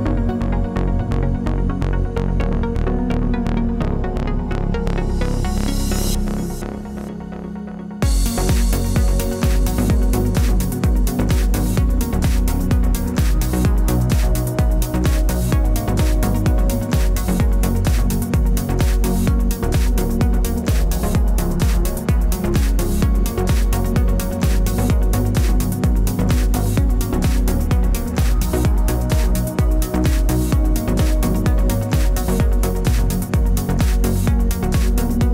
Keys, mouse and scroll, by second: 1.4 click, 2.7 shift+d, 3.1 click, 3.8 shift+d, 3.9 click, 4.5 shift+d, 4.7 click, 4.9 click, 5.5 shift+d, 5.7 click, 6.3 middle click, 6.4 click, 6.5-7.2 click, 7.0 click, 7.1 click, 7.4 click, 7.6 click, 7.8 click, 8.0 click, 8.2 click, 8.4 shift+click, 8.7 shift+click, 8.8 shift+d, 9.0 click, 10.1 click, 10.3 click, 10.9 shift+d, 11.4 click, 12.0 shift+d, 12.5 click, 13.0 KP_3, 13.2 click, 13.8 KP_0, 14.1 click, 14.2 click, 14.4 click, 14.8 click, 14.9 click, 15.1 ctrl+z, 15.6 ctrl+z, 15.6 click, 15.8 ctrl+z, 16.1 click, 16.2 click, 16.5 click, 17.2 click, 17.6-18.0 scroll up 3, 18.1-18.4 scroll down 1, 18.5 click, 18.7 click, 18.9 click, 19.1 click, 20.0 click.